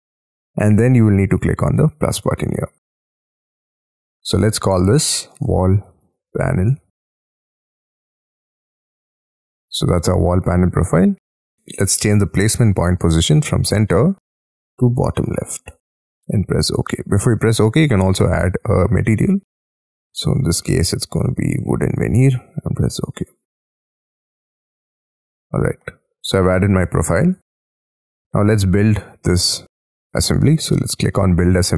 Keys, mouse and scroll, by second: 5.2-8.2 typing, 8.9 middle click, 19.1-24.5 scroll down 13, 24.8-25.8 scroll down 22, 25.8 middle click, 26.9 Escape, 27.1 scroll down 2, 27.4 Escape.